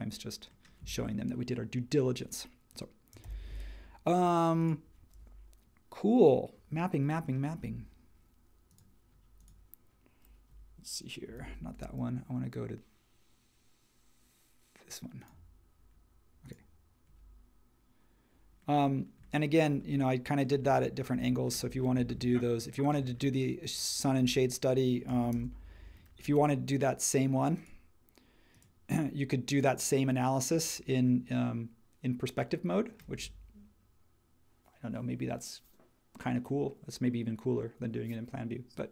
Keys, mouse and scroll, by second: 3.2 super+s, 11.4 super+h, 25.3 shift+c.